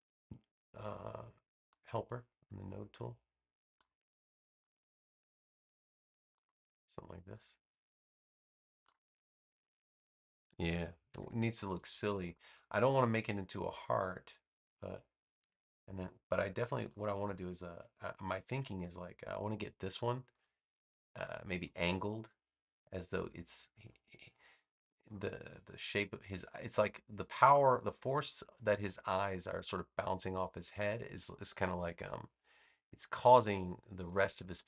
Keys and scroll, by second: 11.0 v, 15.3 a.